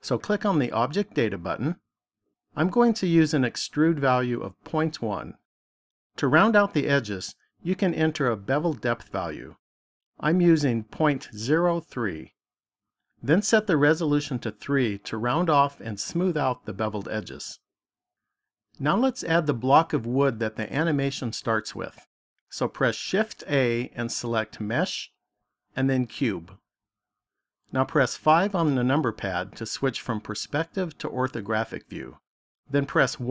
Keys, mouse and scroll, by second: 0.3 click, 5.1 click, 8.5 click, 14.3 click, 14.8 click, 15.3 click, 23.2 shift+a, 28.2 KP_5, 32.9 KP_1.